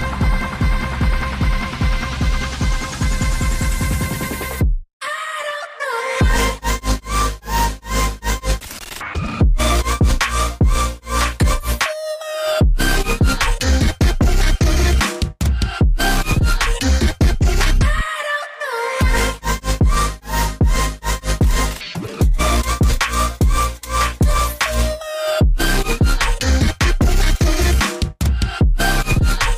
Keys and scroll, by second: 4.7 Tab, 4.7 6, 5.7 shift+Tab, 6.2 shift+Tab, 6.3 shift+Tab, 7.3-7.8 typing, 7.5 Tab, 8.1 Tab, 9.3 shift+Tab, 9.5 shift+Tab, 9.9 shift+Tab, 10.4-13.9 typing, 11.5 Tab, 12.3 shift+Tab, 25.0 Return, 27.7 ctrl+shift+].